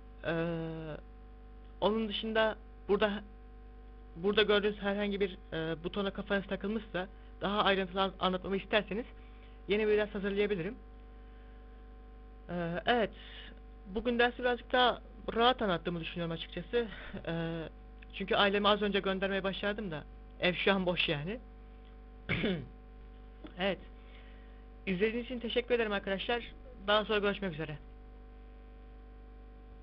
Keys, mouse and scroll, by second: 2.0 click, 3.9 click, 8.9 click, 11.7 middle click, 12.7 scroll down 2.